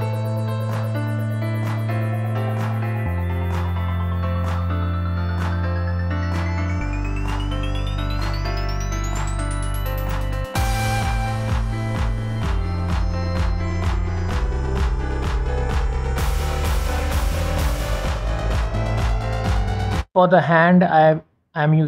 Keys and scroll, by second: 9.3 g, 10.8 t, 11.1 Tab, 17.6 Escape.